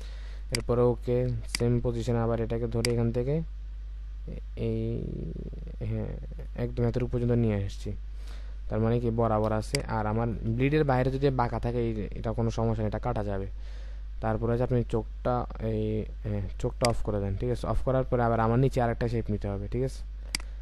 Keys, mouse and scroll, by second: 7.7-8.6 alt+scroll down 1, 8.6-9.5 alt+scroll up 1, 9.5 space, 17.6-18.5 alt+scroll down 1.